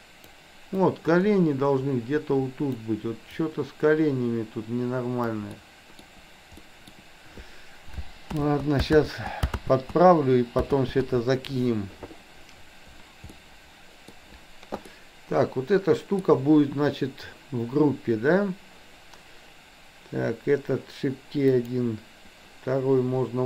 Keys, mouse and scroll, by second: 0.9-2.8 drag, 3.5-5.4 drag, 5.5 middle click, 6.6 middle click, 8.4 ctrl+z, 9.0 ctrl+z, 10.8 ctrl+z, 13.3 middle click, 14.9-16.1 middle drag, 21.5 click.